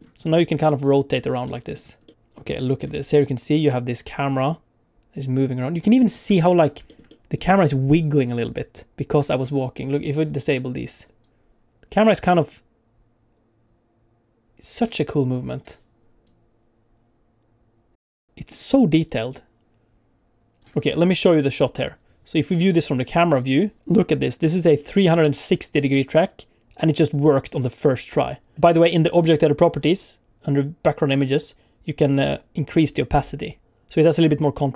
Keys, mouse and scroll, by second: 0.2-0.6 scroll up 2, 0.6 middle click, 1.6 middle click, 2.1 middle click, 2.1 middle click, 3.2 click, 6.0 scroll up 1, 6.3 shift+middle click, 6.9 ctrl+middle click, 7.1 middle click, 8.0 click, 9.6 click, 10.4 click, 11.2 click, 15.5 click, 16.2 click, 18.2 middle click, 21.6 click, 23.4 click, 23.9 ctrl+middle click, 24.6 click, 28.5 click, 29.4 click, 29.8-30.5 scroll down 3, 30.5 click, 31.2-32.4 scroll down 2, 33.1 click.